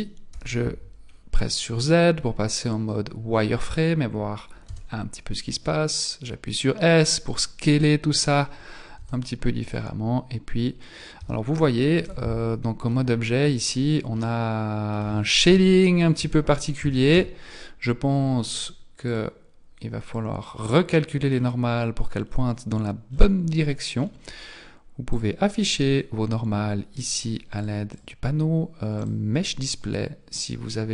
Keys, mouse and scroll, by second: 0.3 z, 1.1-3.3 scroll up 3, 4.7 s, 8.3 alt+right click, 8.9 s, 10.8-11.2 scroll down 3, 11.2 Tab, 12.0 z, 12.9 middle click, 13.8-14.2 scroll down 2, 14.2 middle click, 15.5 KP_1, 16.2 Tab, 16.8 a, 17.3 a, 19.1 click, 20.1 click, 20.5 middle click, 23.1-23.5 scroll down 7, 24.0-25.1 scroll down 5, 25.1 click, 25.9-27.3 scroll up 5, 27.5 click, 27.9 click, 28.9 click.